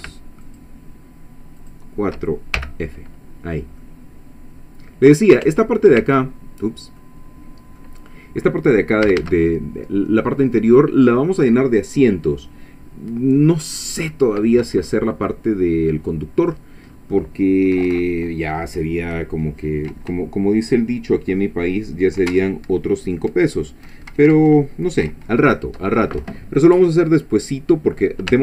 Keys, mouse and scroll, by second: 0.4 ctrl+shift+click, 1.6 shift+click, 2.6 shift+f, 3.4 scroll down 2, 3.8-5.5 drag, 5.5 Tab, 6.7 scroll down 2, 7.0 click, 8.1-8.4 scroll up 2, 9.1 a, 14.1 scroll down 2, 16.4 scroll down 2, 16.9-17.2 scroll up 2, 28.3 Tab.